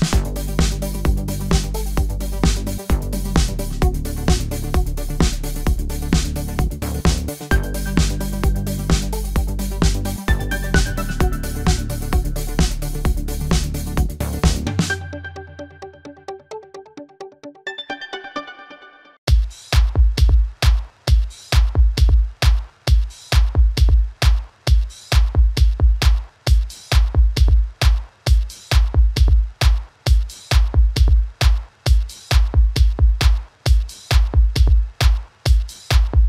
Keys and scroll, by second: 0.7 typing, 9.2 typing, 14.8 typing, 25.0 typing, 28.6 typing, 32.0 a.